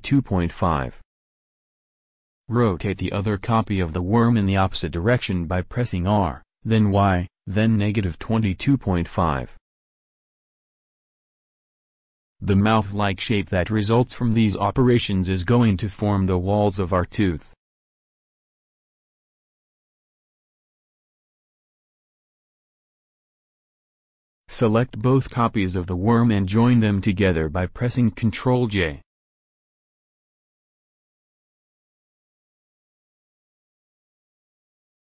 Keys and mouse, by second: 3.6 r, 8.8-9.5 middle drag, 13.5-21.4 middle drag, 23.9-26.8 right drag, 27.1 ctrl+j.